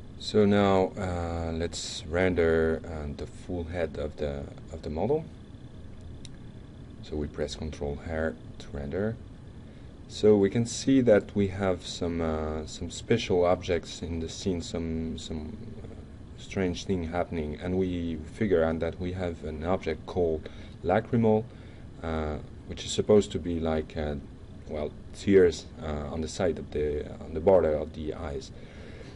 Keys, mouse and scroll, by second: 1.0-1.7 drag, 1.8 right click, 2.1-2.6 drag, 2.7 right drag, 3.3 middle drag, 3.7 right click, 4.1 click, 4.5 right click, 5.4 ctrl+r, 13.5 drag, 14.0 click, 14.4 ctrl+Tab, 15.1 click, 17.5 click, 19.0 click, 19.5 f, 22.7-23.0 alt+middle drag, 26.4 click.